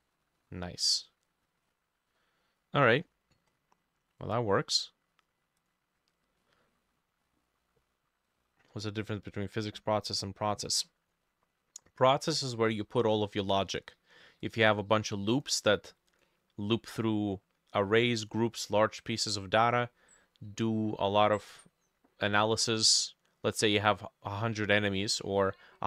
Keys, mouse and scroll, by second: 0.0 middle click, 0.4 middle click, 1.7-3.0 scroll down 8, 3.0-4.6 scroll up 15, 4.6-5.0 scroll up 4, 6.4 middle click, 12.6 middle click.